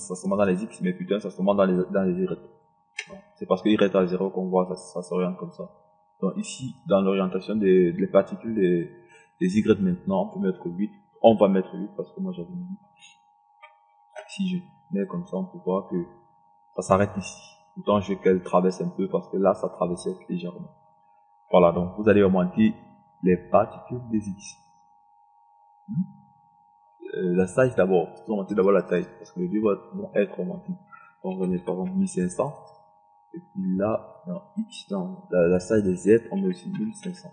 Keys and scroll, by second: 11.6 KP_8, 31.6 KP_1, 31.9 KP_5, 32.4 KP_0, 36.6 1, 37.1 5.